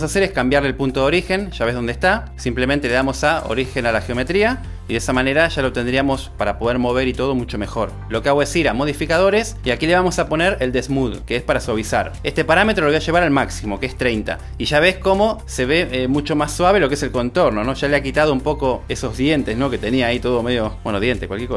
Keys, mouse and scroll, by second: 4.4-7.2 drag, 7.8 r, 10.2-12.6 drag.